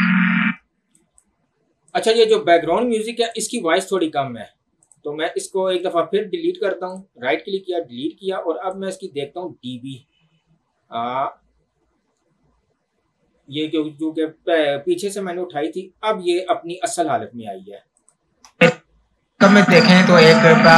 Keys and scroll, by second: 0.5 space, 18.4 space.